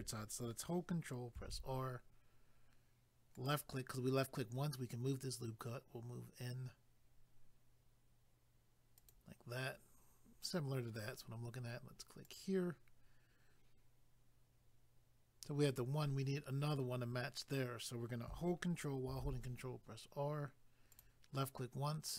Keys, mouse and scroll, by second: 1.4 ctrl+r, 3.4 click, 3.5 click, 9.0 click, 9.1 click, 12.2 click, 12.4 click, 19.1 ctrl+r, 20.9 click, 21.0 click.